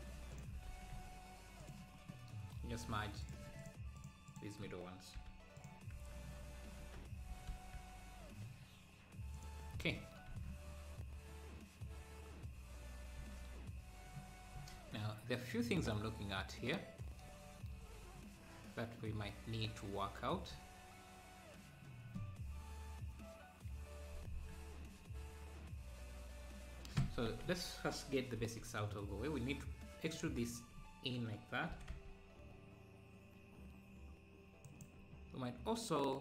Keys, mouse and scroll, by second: 0.7 s, 2.1 scroll up 1, 2.7 scroll up 1, 3.2-4.9 drag, 5.2 m, 6.0 Tab, 6.3 scroll down 1, 7.3 g, 9.8 scroll up 1, 10.4 ctrl+s, 10.7-11.3 scroll up 1, 11.3 scroll down 1, 12.4 scroll down 2, 13.3 ctrl+s, 14.7 ctrl+s, 15.1-15.7 scroll up 1, 18.2-18.6 scroll down 2, 27.0 Tab, 27.5 a, 28.4 e, 30.2 Tab, 31.7 g.